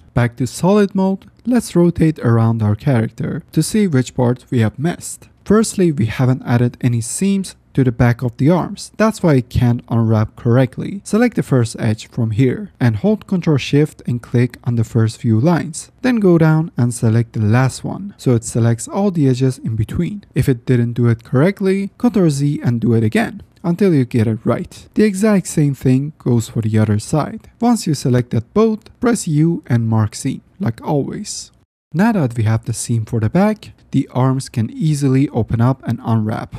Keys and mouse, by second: 0.0 F9, 0.7 shift+middle click, 2.5 shift+middle click, 3.4-7.4 middle drag, 7.8 shift+middle click, 8.8 middle click, 11.6 middle drag, 17.7-18.1 shift+middle drag, 18.8 shift+middle click, 19.4 ctrl+shift+z, 21.6 ctrl+z, 26.3 drag, 26.5 middle click, 28.2 ctrl+shift+middle click, 29.9 u, 31.9 click, 32.3 middle click, 32.7-33.1 middle drag, 33.4 shift+middle drag, 34.4-34.8 middle drag, 34.5 drag, 35.1 middle click.